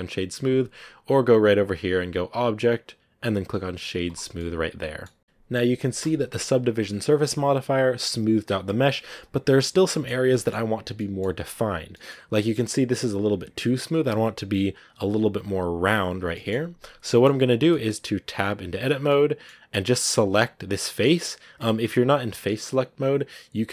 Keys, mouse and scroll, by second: 0.3-4.3 drag, 4.3-9.6 middle drag, 9.6 scroll up 1, 9.7-12.0 middle drag, 12.0 scroll up 1, 12.3-16.1 middle drag, 16.1 scroll down 1, 16.2-18.2 middle drag, 18.2 Tab, 19.0 middle click, 19.7 right click, 20.7-23.7 middle drag.